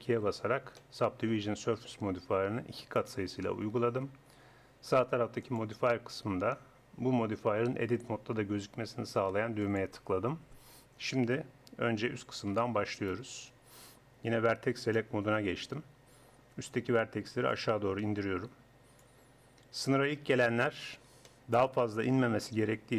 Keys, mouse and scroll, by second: 0.0 ctrl+2, 5.4-7.4 drag, 9.6-11.6 drag, 12.2 a, 16.0-19.4 drag.